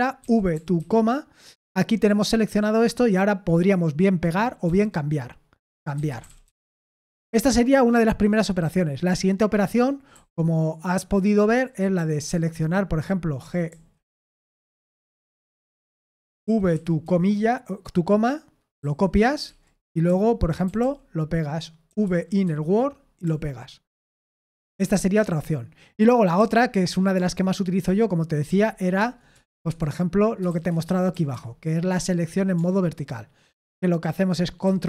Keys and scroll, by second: 0.0-1.2 typing, 4.6-6.9 typing, 9.6-10.1 typing, 11.3-14.2 typing, 16.2-17.5 typing, 18.8-23.2 typing, 26.4 j, 28.5 shift+i, 29.0 Return, 29.3 Return, 29.5-31.8 typing, 29.7 Escape, 34.6 ctrl+v.